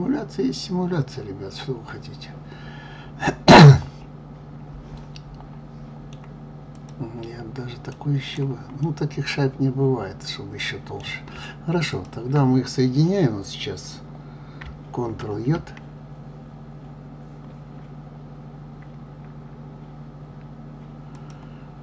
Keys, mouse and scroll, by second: 6.7 click, 7.9-8.8 right drag, 8.8-11.8 middle drag, 11.9 shift+click, 15.5 ctrl+j, 21.1 click.